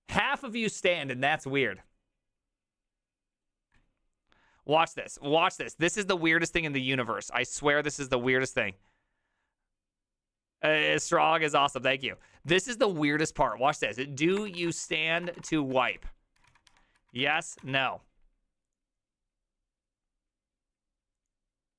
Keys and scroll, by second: 14.0-18.1 typing.